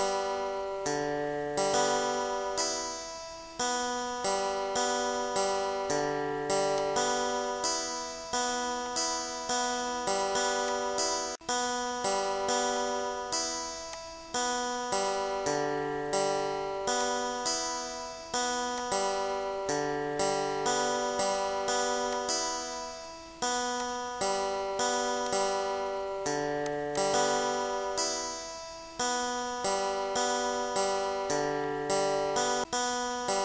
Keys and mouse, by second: 2.7 click, 4.4 click, 5.9 click, 6.8 click, 8.0 click, 8.9 click, 9.5 shift+click, 10.7 shift+click, 11.8 click, 12.8 click, 13.4 2, 13.7 5, 14.0 click, 14.7-16.5 typing, 15.1 click, 16.3 click, 17.0 click, 18.8 click, 20.3 click, 21.7 click, 22.7 click, 23.8 shift+click, 24.7 click, 26.5 click, 28.3 click, 29.9 click, 31.0 click, 32.3 click, 32.7 click.